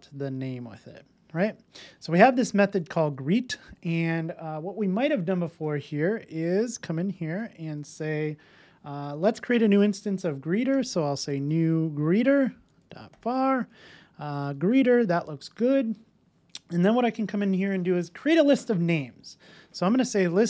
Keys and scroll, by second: 0.3 Return, 1.5 super+s, 7.1 Tab, 12.0 Return.